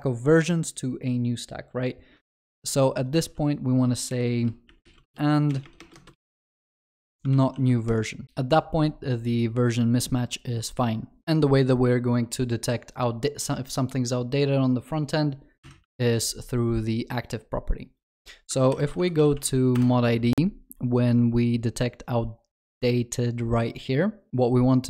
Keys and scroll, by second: 3.2 ctrl+c, 7.5 ctrl+s, 16.0 ctrl+s, 18.8 ctrl+shift+n.